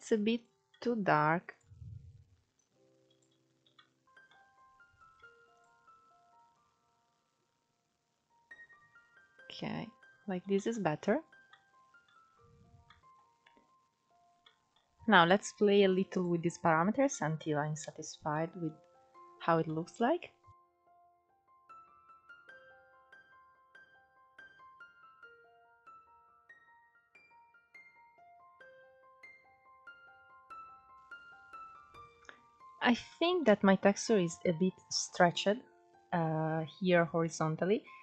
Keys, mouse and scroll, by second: 0.0-1.9 middle drag, 1.9 click, 3.1-3.7 middle drag, 3.7 scroll up 4, 5.8 click, 9.4-9.9 scroll down 2, 9.9 middle click, 10.3-10.8 scroll up 4, 15.0-17.4 drag, 17.4 scroll up 1, 17.7 middle click, 18.2-19.0 scroll up 1, 19.0 middle click, 19.5-20.7 scroll down 1, 20.7-21.7 drag, 22.4 click, 24.0-25.9 drag, 25.9 scroll down 6, 26.1-27.6 scroll up 3, 27.6 scroll up 1, 27.8-28.4 scroll down 3, 28.4 scroll up 3, 28.5 click, 30.9 scroll up 3, 31.1-31.8 scroll down 2, 31.8-32.8 scroll up 2, 32.8-33.3 shift+middle drag, 33.3 scroll up 1, 33.9-35.5 scroll up 1, 37.0-38.0 scroll down 2.